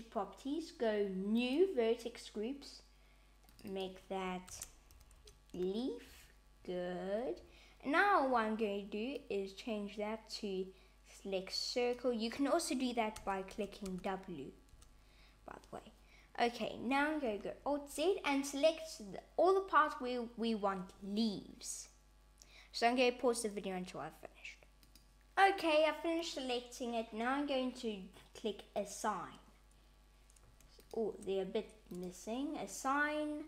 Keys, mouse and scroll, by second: 1.4 click, 3.5 click, 3.7 click, 9.1 click, 13.1 w, 13.5 w, 13.9 w, 14.7 w, 17.4 alt+z, 28.7 click, 30.7 shift+click, 31.8 click.